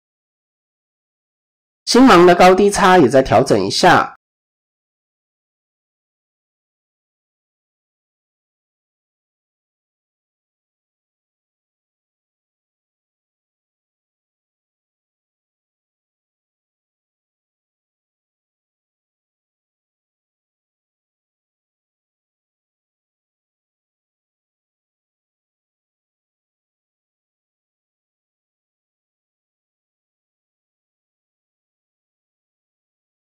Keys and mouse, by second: 1.1 click, 1.3 middle click, 2.9 middle click, 5.1 shift+click, 5.4 middle click, 6.8 middle click, 8.0 shift+middle click, 8.3 middle click, 9.5 shift+click, 9.8-11.4 middle drag, 12.2 middle click, 14.1 middle click, 14.9 middle click, 15.7 middle click, 16.5 middle click, 17.3 shift+middle click, 18.8-19.8 drag, 20.0 middle click, 20.8 shift+middle click, 21.3 middle click, 22.4-23.6 middle drag, 24.1 click, 24.9 click, 26.2 KP_1, 26.2 KP_2, 26.9 KP_1, 28.9 middle click, 30.7 ctrl+r.